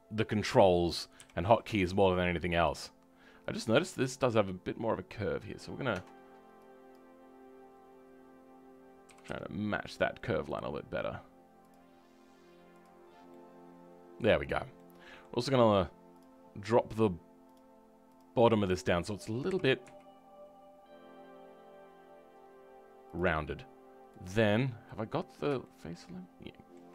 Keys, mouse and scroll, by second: 1.1 KP_7, 3.4 click, 3.8-5.9 scroll up 2, 5.9 Tab, 6.9 click, 13.0 scroll down 2, 13.3-14.4 middle drag, 14.4-14.7 scroll up 5, 14.7-16.2 middle drag, 16.2 click, 17.5-18.6 drag, 18.6 middle click, 19.4 g, 24.5-24.8 scroll up 2, 24.8-26.9 middle drag.